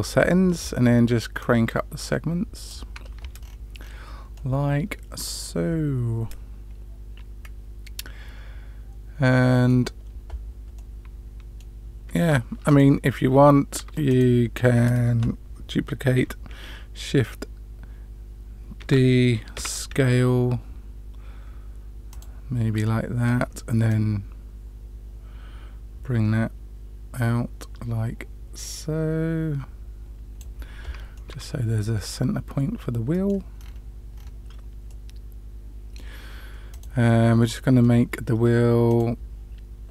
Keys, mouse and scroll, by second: 1.4-2.6 drag, 3.3-3.8 scroll down 3, 3.7 scroll up 1, 3.8-4.3 scroll down 1, 4.3-9.7 middle drag, 10.7-11.6 middle drag, 12.6 click, 13.7 Tab, 14.0 click, 18.8 shift+d, 22.8 middle click, 23.8-30.4 drag, 31.1-33.3 middle drag, 33.5 scroll down 1, 33.6 scroll up 1, 33.7-34.2 scroll down 2, 34.8-36.0 middle drag, 34.8 scroll down 1, 36.7 click.